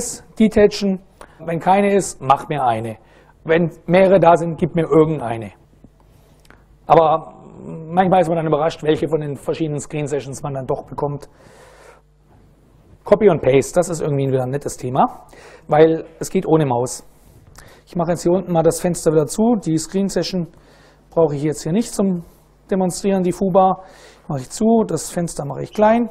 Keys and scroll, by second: 16.2 super+Right, 19.7-20.9 typing, 23.7 Return, 25.2 super+n.